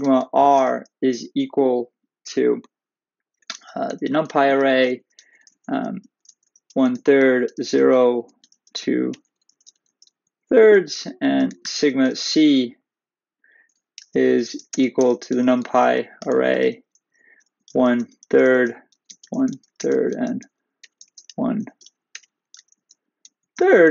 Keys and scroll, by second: 5.4 Left, 10.3 Right, 11.0 Return, 16.9 Left, 23.4 Right.